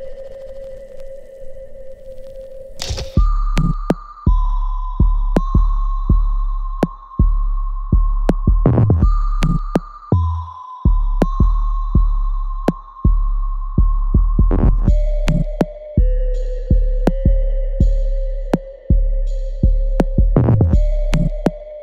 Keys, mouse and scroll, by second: 0.1 right click, 0.8 click, 1.1 alt+click, 2.2-4.5 alt+right drag, 4.5-4.9 scroll down 1, 5.9 right click, 7.2 click, 8.3-10.7 ctrl+right drag, 10.7-12.0 alt+right drag, 12.0-14.5 alt+drag, 14.5-15.8 ctrl+drag, 15.8-19.0 alt+drag, 19.0 alt+right click, 19.4-21.6 alt+drag, 21.6 alt+middle click.